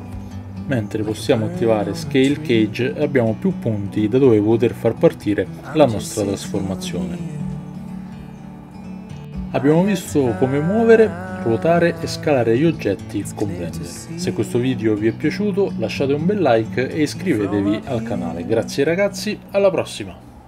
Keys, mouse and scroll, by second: 0.0-1.3 drag, 4.2-9.3 drag.